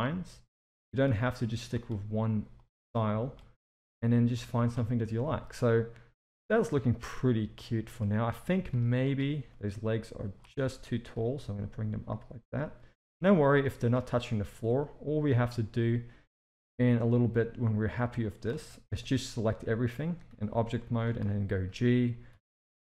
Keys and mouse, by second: 1.4 click, 1.8 g, 3.1 click, 3.6 g, 4.3 z, 4.7 Tab, 5.2 alt+a, 7.6 shift+middle click, 8.4 Tab, 8.7 z, 9.5 click, 10.8 g, 13.1 Tab, 13.5 z, 14.8-15.3 shift+middle drag, 16.5-18.4 middle drag, 18.8 KP_1, 20.3 a, 20.8 shift+middle drag, 21.6 g.